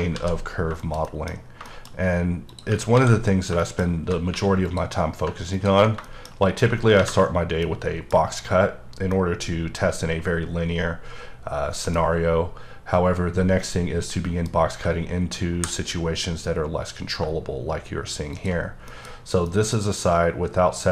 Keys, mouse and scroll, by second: 0.2 ctrl+z, 0.5 scroll up 1, 0.8 shift+middle click, 1.4 scroll down 2, 1.6 middle click, 1.9-2.5 scroll up 3, 2.5 click, 3.0 ctrl+x, 3.2-4.3 scroll down 5, 4.3 3, 4.6 click, 5.0-5.5 scroll down 2, 5.5 ctrl+click, 6.2 shift+middle click, 7.6 middle click, 8.3-8.8 scroll up 2, 8.8-9.1 scroll down 1, 9.1-12.2 middle drag, 12.2-13.1 scroll up 2, 13.1-13.6 scroll down 1, 13.6 middle click, 14.5 scroll up 2, 15.5 ctrl+b, 18.3 shift+click, 18.6-18.9 scroll down 2, 18.9 middle click, 19.1-19.5 scroll up 2, 19.5 middle click.